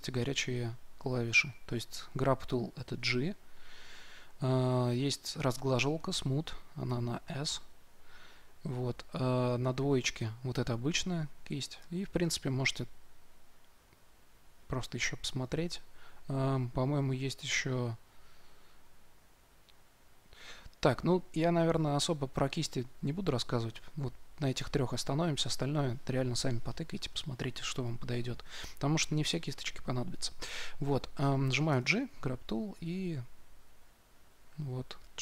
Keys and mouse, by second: 3.0 g, 6.8 s, 9.5 2, 11.7-13.5 drag, 31.6 g, 32.9-35.0 drag.